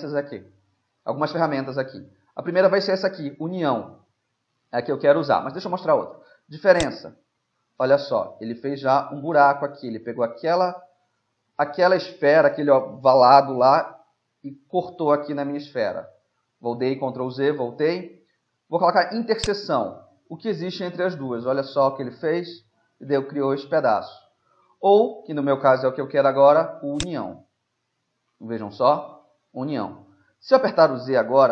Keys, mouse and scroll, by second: 6.8-8.7 drag, 8.7 middle click, 15.8 ctrl+z, 19.5-21.5 drag, 21.2 middle click, 23.5 ctrl+z, 27.0-28.9 drag, 27.8 middle click, 28.9-30.3 middle drag, 30.5 z.